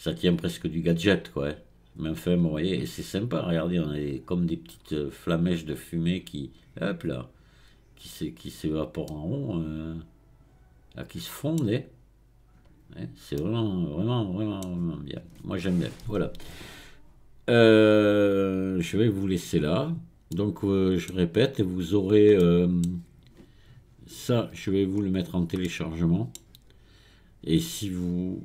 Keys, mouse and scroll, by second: 0.1-3.1 scroll down 1, 9.1-12.1 middle drag, 13.4-16.4 middle drag, 18.1-19.7 drag, 19.7-20.3 scroll down 4, 20.3 middle click, 21.1-21.9 scroll down 1, 21.9-22.4 scroll down 1, 22.4-24.9 middle drag, 24.9-25.6 scroll up 3, 25.6-28.4 middle drag.